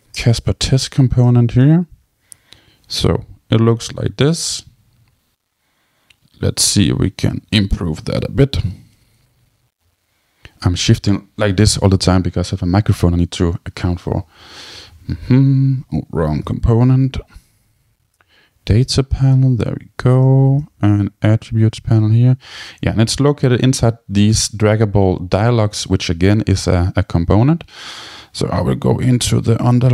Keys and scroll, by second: 9.0 super+k, 14.5 Down, 14.9 Return, 16.2 super+k, 17.2 Down, 17.9 Return.